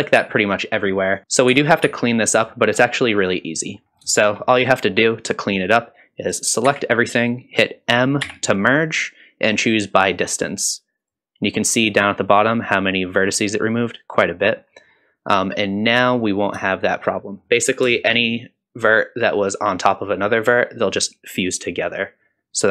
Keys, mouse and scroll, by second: 0.2 g, 1.1 click, 1.2 ctrl+z, 1.5 ctrl+z, 1.8 ctrl+z, 2.7-3.4 scroll down 3, 3.4 middle click, 3.8 scroll up 2, 4.1 shift+middle click, 4.6-5.7 scroll down 2, 6.6 a, 8.2 m, 15.6-16.0 scroll up 3, 16.0 middle click, 16.7 shift+middle click, 17.2 middle click, 17.7 scroll up 2, 17.9 shift+middle click, 18.1 shift+scroll down 1, 21.8 click.